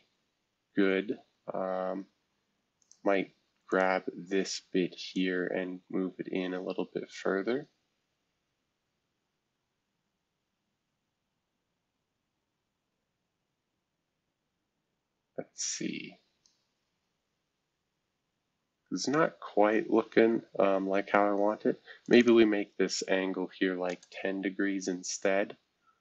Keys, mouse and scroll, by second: 1.5-2.5 scroll up 2, 2.5 scroll up 1, 2.8-16.8 drag, 16.8-18.0 scroll down 2, 18.0-18.7 scroll down 1, 18.7-19.6 scroll down 1, 22.0 click, 22.2 click, 23.4-24.1 typing, 25.2 scroll down 1.